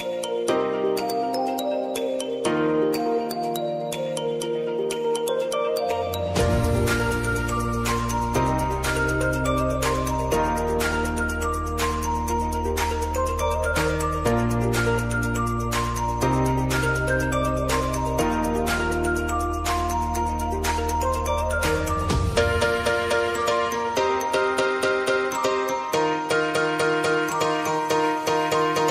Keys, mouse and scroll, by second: 3.4 click, 4.1 space, 5.8 click, 7.2 shift+click, 8.6 ctrl+shift+c, 9.8-11.7 typing, 13.0 click, 14.4 space, 16.5 space, 17.0 click, 18.6 space, 20.3 click, 20.7 space, 23.1 click, 24.2 space, 26.2 space, 26.7 click, 28.1 F4, 28.8 ctrl+a.